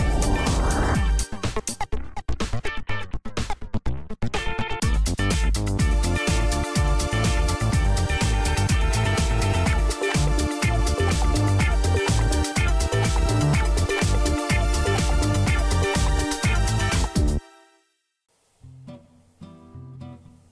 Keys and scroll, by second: 0.0 Up, 0.9 space, 3.0 Tab, 5.8 Return, 15.6-16.6 typing, 16.6 Return.